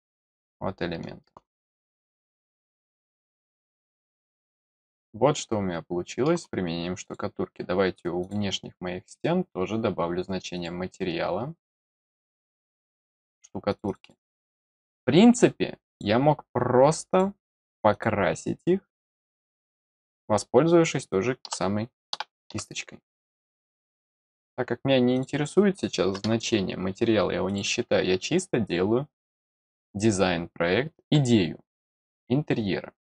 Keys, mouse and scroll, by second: 0.0-1.2 middle drag, 1.5 middle click, 2.0-6.2 middle drag, 7.0 click, 8.2 click, 10.5 click, 12.8 click, 13.6 click, 13.8 click, 14.0 click, 14.1 click, 14.3 click, 15.9 click, 17.0 click, 17.9 click, 20.0 scroll up 1, 23.9 click, 25.1 click, 27.4 click.